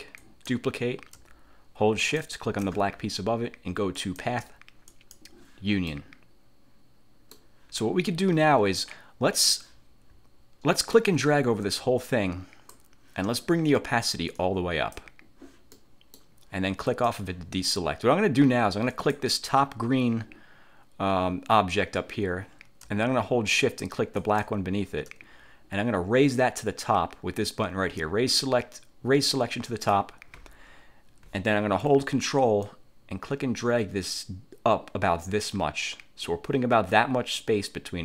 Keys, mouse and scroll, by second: 0.3 click, 2.1 shift+click, 4.1 click, 5.0 click, 6.0 middle click, 6.0-6.9 scroll up 1, 6.9 click, 10.5-10.9 scroll down 2, 11.1-13.1 drag, 14.5 click, 15.9 middle click, 17.1 click, 19.1 click, 24.3 shift+click, 29.8 click, 32.8-38.0 ctrl+drag.